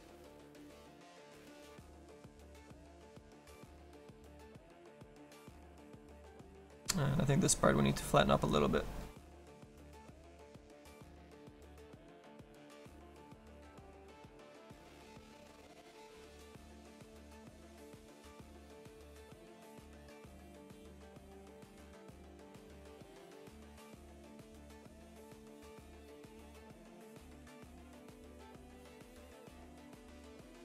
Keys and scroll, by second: 4.3 s, 9.4 s, 20.8 s, 21.5 s.